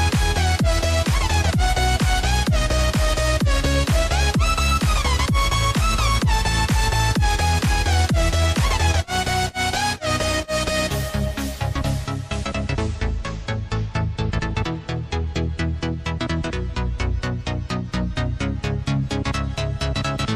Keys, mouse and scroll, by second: 0.7 click, 1.6 click, 3.4 click, 3.8 click, 4.8 click, 5.5-7.2 drag, 8.4 drag, 8.8 click, 10.0 click, 10.8 click, 11.8 s, 14.5 Tab, 15.7 click, 16.5 alt+click, 17.4 alt+shift+click, 18.4 ctrl+b, 20.2 click.